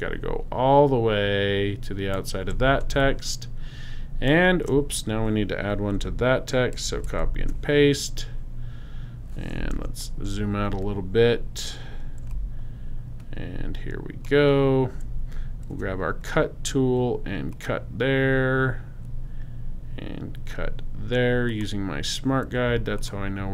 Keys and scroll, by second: 2.8 alt+shift+space, 3.6 shift+space, 6.7 super+c, 7.2 super+f, 9.7 super+-, 15.7 alt+shift+c.